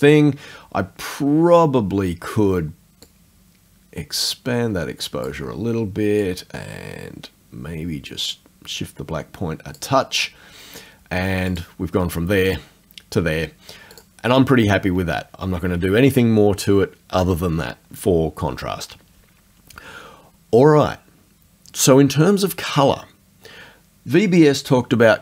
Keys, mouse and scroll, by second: 0.1 click, 3.1-5.4 drag, 5.4-6.2 scroll up 2, 6.2-10.0 drag, 11.6 click, 12.5 click, 14.0 click.